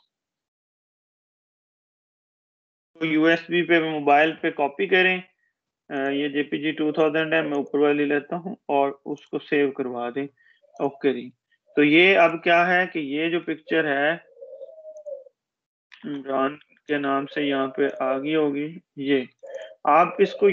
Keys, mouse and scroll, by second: 0.8-4.4 typing, 5.8 click, 16.1 click, 16.2 typing, 16.6 click.